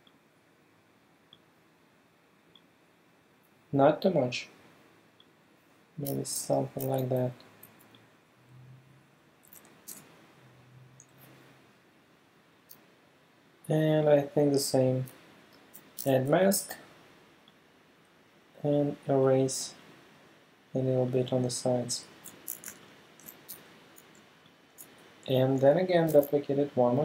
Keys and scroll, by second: 6.4 super+t, 9.9 alt+Return, 10.6 Return, 16.0 e, 23.0 alt+super+space, 23.5 alt+super+v, 24.2 space, 26.1 super+j.